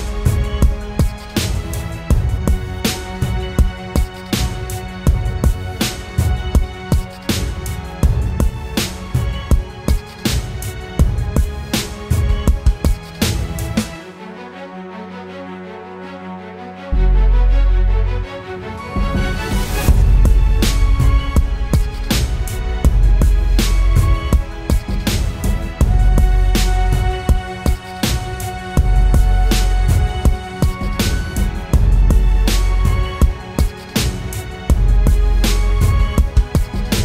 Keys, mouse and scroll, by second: 2.1 typing, 3.8-5.0 typing, 11.4 double click, 15.1 right click, 17.0 typing, 17.5 double click.